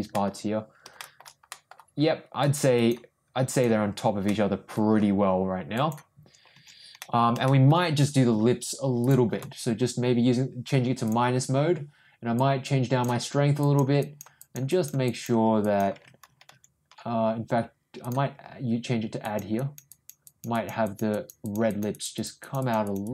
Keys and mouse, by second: 0.1 ctrl+middle click, 1.0 shift+middle click, 1.5 middle click, 2.4 click, 2.7 click, 3.5 click, 4.2 middle click, 5.7 click, 7.0 middle click, 7.4 ctrl+shift+middle click, 9.0 ctrl+click, 11.0 click, 12.4 click, 13.6 click, 14.0 click, 14.3 click, 14.7 click, 15.0 click, 15.6 click, 18.0 ctrl+click, 19.2 ctrl+click, 19.5 ctrl+click, 19.9 ctrl+click, 20.2 ctrl+click, 20.5 click, 20.8 click, 21.1 click, 21.4 click, 21.7 click, 21.9 click, 22.1 click, 22.4 click, 22.6 click, 22.8 click, 23.0 click.